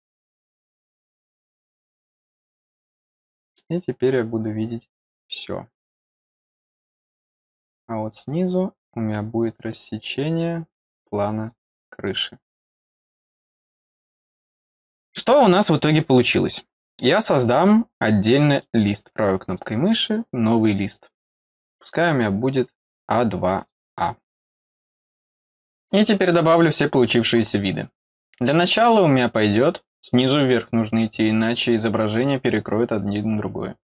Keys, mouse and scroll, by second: 1.0 click, 1.6 click, 2.9-5.1 drag, 7.4 click, 9.4 click, 11.4 click, 13.8 click, 16.6-16.9 scroll down 2, 17.1 middle click, 17.5-17.9 scroll down 2, 18.5 right click, 19.4 click, 21.4-22.1 scroll down 2, 22.3 scroll up 2, 23.6 click, 28.5-28.9 scroll up 2.